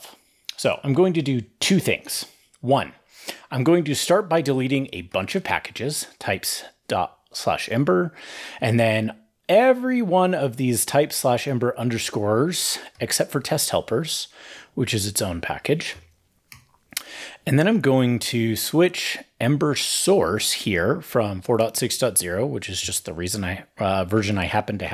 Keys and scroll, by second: 1.9 super+s, 4.9 ctrl+shift+k, 12.7 ctrl+shift+k, 15.7 ctrl+shift+k, 16.3 super+s, 21.9 shift+super+Right.